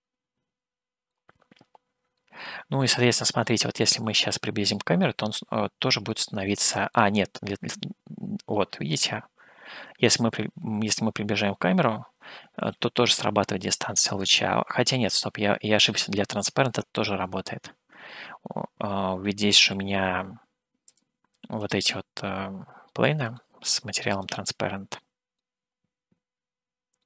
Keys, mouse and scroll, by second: 1.5-4.4 middle drag, 5.1-5.5 scroll up 2, 5.7 scroll up 1, 6.4-11.6 scroll up 1, 11.6 scroll up 8, 12.4-13.8 scroll down 7, 14.1 scroll down 1, 14.8-17.8 middle drag, 20.9 click, 21.9-23.3 middle drag, 24.3 click, 25.7-27.0 middle drag.